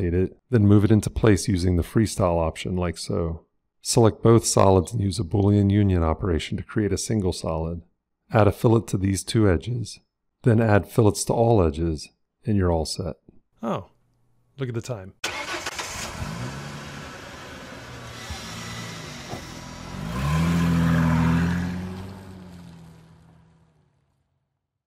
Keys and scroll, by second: 0.5 g, 1.0 f, 6.4 q.